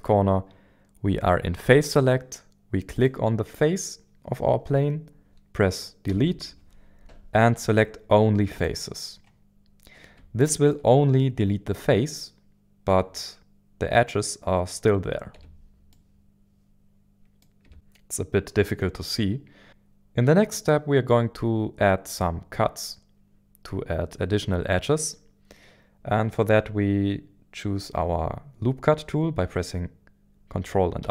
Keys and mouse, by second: 1.7 click, 2.9 click, 6.1 Delete, 10.4 shift+middle click, 15.3 Tab, 15.9-17.6 middle drag, 17.6 Tab, 17.7 KP_7, 31.0 ctrl+r.